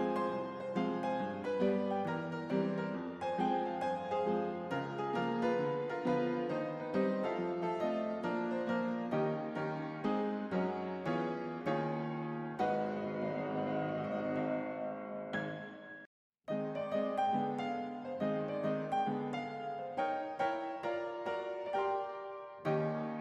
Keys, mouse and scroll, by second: 1.0-1.9 drag, 4.4-9.1 drag, 12.0 space, 17.8 click, 20.9 space.